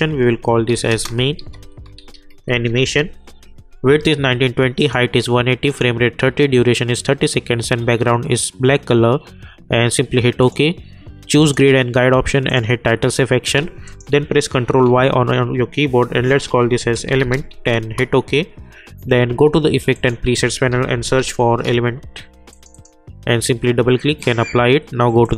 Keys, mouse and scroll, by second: 0.0-3.5 typing, 3.5-4.8 scroll up 1, 4.8 click, 10.4 click, 14.7 ctrl+y, 16.2-18.0 typing, 19.9 click, 20.5-21.7 typing, 22.5 click, 25.2 click.